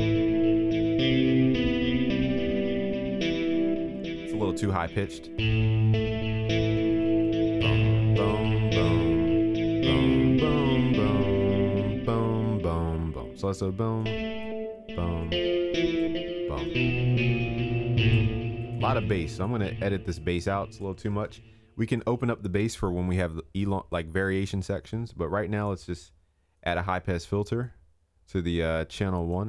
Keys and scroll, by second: 7.0 ctrl+s, 21.1 ctrl+s.